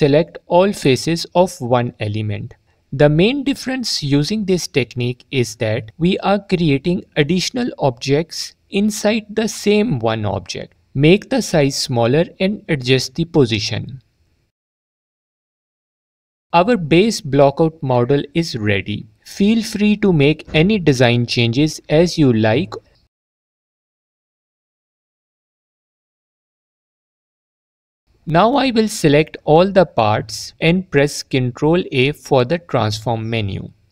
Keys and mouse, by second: 1.1 l, 1.5 shift+d, 2.9 click, 6.8 Tab, 8.9 s, 13.2 click, 27.8 click, 28.4 click, 31.2 ctrl+a.